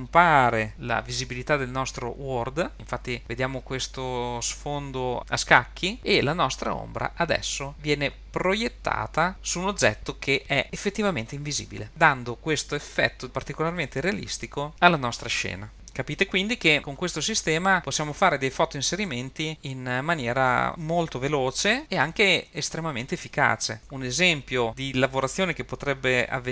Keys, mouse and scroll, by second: 3.2 click, 5.3 click, 7.1-11.5 drag, 12.7 r, 17.9 r, 20.3 super+z, 20.5 super+z.